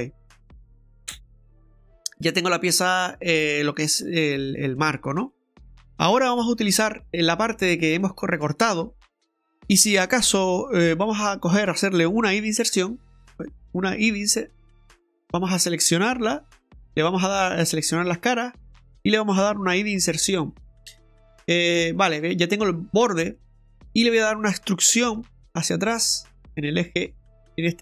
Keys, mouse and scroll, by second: 5.3 right click, 6.4 Tab, 6.7 right click, 12.5 i, 14.0 i, 15.2 right click, 16.3 Tab, 18.1 click, 18.7 right click, 19.9 i, 23.3 middle click, 25.1 middle click, 25.2 e.